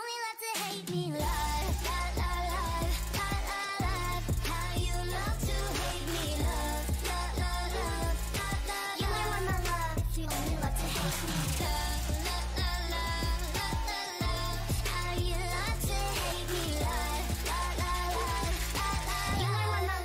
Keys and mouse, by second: 5.3-7.5 right drag, 7.5 g, 8.4 o, 8.7 g, 11.7 ctrl+Tab, 14.4 g.